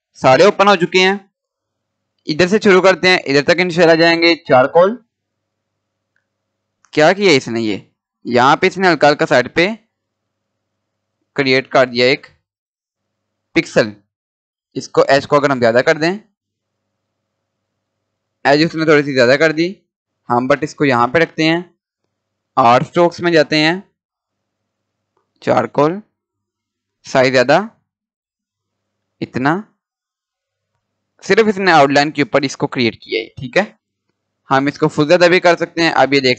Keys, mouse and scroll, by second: 4.5 click, 4.6 click, 7.3 scroll up 1, 8.6 scroll down 1, 9.8-10.4 scroll up 1, 11.5 click, 11.7-12.8 drag, 12.8-13.2 scroll up 1, 14.8 click, 17.0-17.3 scroll down 1, 19.5 scroll up 1, 20.0 scroll down 1, 21.8 click, 24.8 click, 34.9 scroll down 1, 35.2 scroll up 1.